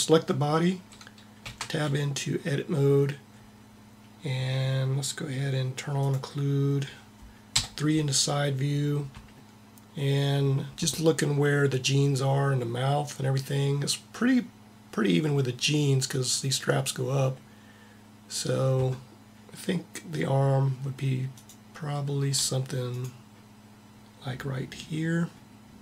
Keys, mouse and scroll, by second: 1.2 Tab, 5.7-7.4 drag, 7.2 KP_3, 21.0-24.4 middle drag, 24.5 middle click, 24.7-25.8 middle drag.